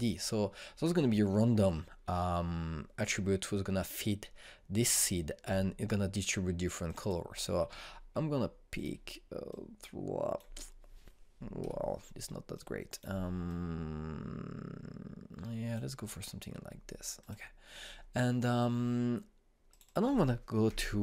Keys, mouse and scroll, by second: 7.5-12.2 drag, 12.2 Escape, 13.2-17.8 drag, 20.3 click.